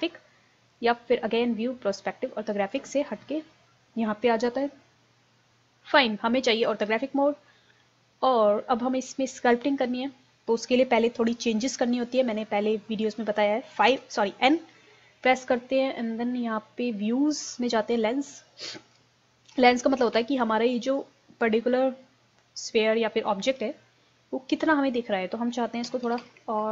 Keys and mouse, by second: 9.5-13.9 drag, 13.9 n, 17.0-20.8 drag, 25.2-26.7 drag, 26.2 KP_0.